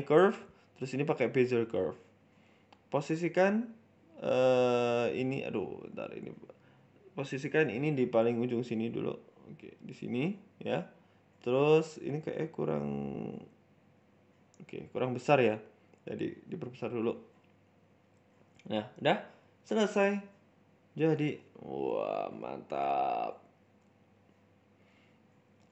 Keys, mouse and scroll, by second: 0.7 click, 0.7 scroll down 1, 2.3 KP_1, 3.5-4.5 scroll up 5, 4.5-5.1 scroll up 1, 5.1 click, 5.1-6.0 scroll up 3, 6.6 g, 9.9 shift+middle click, 10.2-10.5 scroll up 3, 10.4 Tab, 10.7 shift+middle click, 10.9 scroll down 5, 11.2-11.5 scroll up 1, 11.5 a, 12.1 r, 13.6 Tab, 15.1 click, 17.9-18.2 scroll down 3, 18.1 Tab, 18.2 middle click, 18.6 Tab, 18.7 middle click, 18.9 z, 19.2 z, 20.1 middle click, 20.3 scroll up 1, 20.6 middle click, 20.9-21.4 scroll up 1, 21.5-22.0 scroll up 1, 21.5 g, 22.7-23.1 scroll down 4, 22.9 middle click, 23.3 middle click, 23.4 middle click, 23.7 scroll up 2, 23.8 middle click, 24.7 scroll up 1, 24.9 shift+middle click, 25.2 middle click.